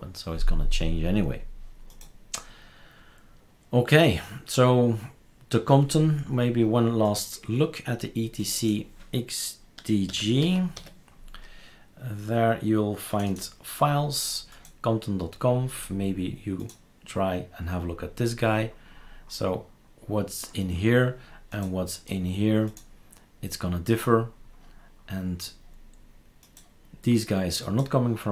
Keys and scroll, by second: 9.8-11.2 typing.